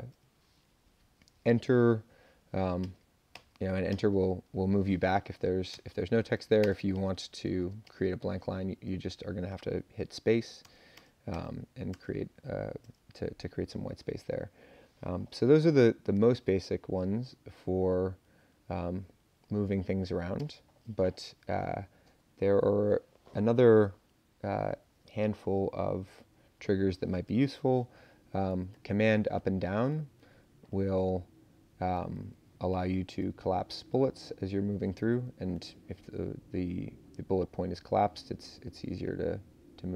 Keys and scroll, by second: 0.3 Up, 1.2 Up, 2.8 Return, 3.7 Return, 5.7 Tab, 6.6 space, 6.9 Return, 7.6 space, 7.8 Return, 10.6 BackSpace, 10.9 BackSpace, 11.9 BackSpace, 12.8 BackSpace, 17.8 Up, 18.1 Up, 18.4 Up, 18.8 Up, 19.0 Up, 19.6 Up, 20.4 space, 28.7 super+Up, 29.4 super+Down, 30.3 super+Up, 31.1 super+Down, 32.7 super+Up, 33.2 super+Down, 34.7 super+Up, 35.0 Down, 35.8 Up, 37.6 Down, 38.1 Down, 38.5 Up, 38.7 Up, 39.6 Up.